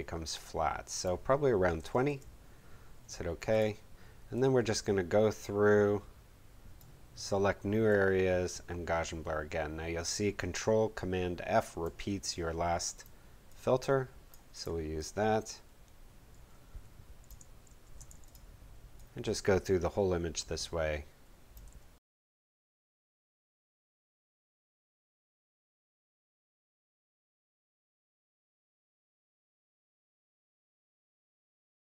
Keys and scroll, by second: 1.4-2.3 typing, 17.6 ctrl+super+f, 21.7 ctrl+super+f, 23.0 ctrl+super+f, 23.3 super+z, 24.8 ctrl+super+f, 26.7 ctrl+super+f, 27.5 super+z, 28.5 ctrl+super+f, 31.7 super+f.